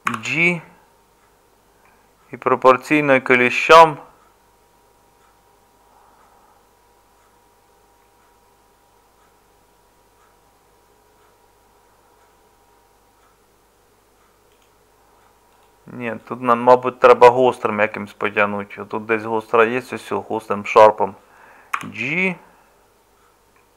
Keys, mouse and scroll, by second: 0.1 g, 21.8 g.